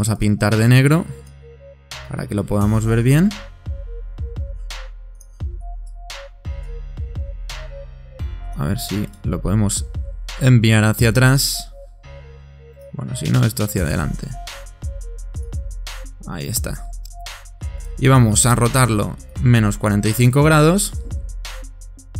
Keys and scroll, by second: 3.8 super+9, 5.0 super+9, 7.3 super+9, 8.5 super+9.